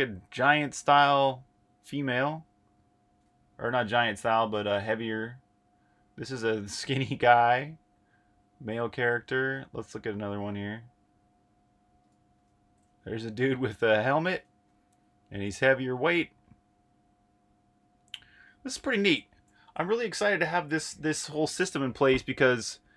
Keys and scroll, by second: 14.5 8.